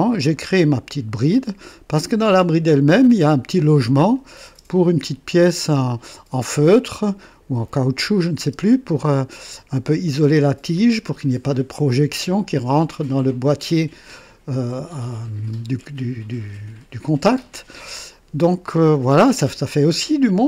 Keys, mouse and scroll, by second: 0.4 right click, 1.4-2.6 drag, 2.7 click, 4.1 click, 4.5 space, 8.4 space, 10.9-11.3 scroll down 2, 11.5-12.4 drag, 18.0-20.1 drag.